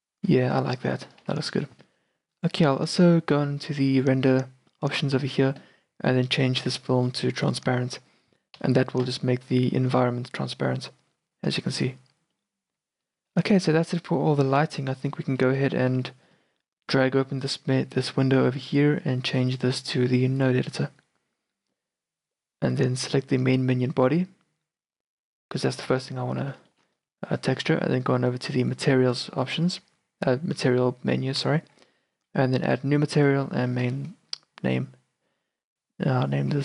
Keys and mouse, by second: 1.3 z, 4.0-9.2 drag, 8.7 z, 13.3 shift+b, 13.9-15.1 drag, 15.4-16.0 drag, 16.0 z, 17.5-19.3 drag, 20.6-21.7 drag, 22.1-25.0 drag, 23.5-26.0 right drag, 26.0 z, 26.4 z, 26.8 middle click, 27.2 middle click, 28.7 click, 32.7-35.1 drag.